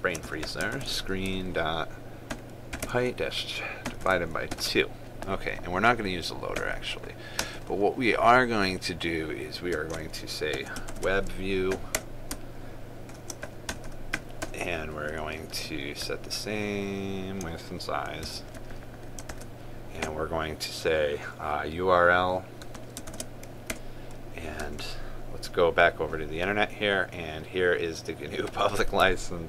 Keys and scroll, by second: 1.4 ctrl+space, 11.6 ctrl+space, 18.9 ctrl+c, 23.9 ctrl+space.